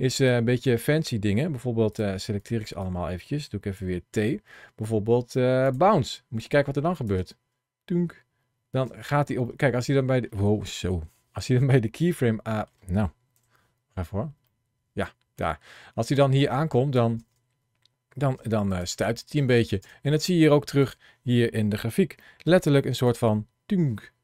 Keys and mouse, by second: 0.2 click, 2.2 click, 3.6 t, 6.2 click, 7.0 space, 8.7 space, 9.3 middle click, 10.7 KP_1, 11.9 shift+middle click, 13.2 KP_1, 14.3 middle click, 15.9 click, 17.0 space, 18.2 space, 18.5 click, 19.6 space, 20.7 click, 22.1 shift+middle click, 22.9-24.2 drag.